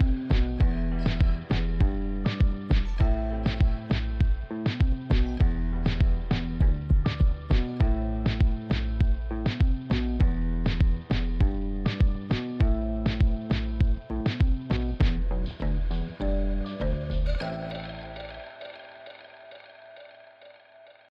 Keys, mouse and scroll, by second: 3.5 click, 19.5 click.